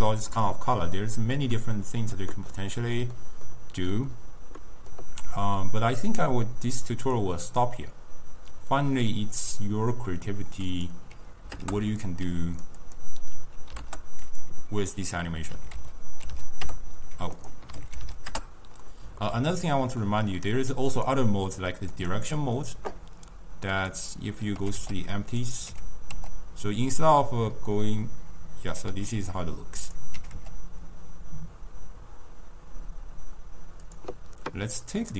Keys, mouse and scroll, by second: 1.0-6.9 middle drag, 6.9 click, 7.2-10.2 drag, 10.7-19.3 drag, 19.3-21.0 middle drag, 21.0-23.9 drag, 24.7 g, 25.8 g, 29.0 s, 30.2 g, 35.0 click.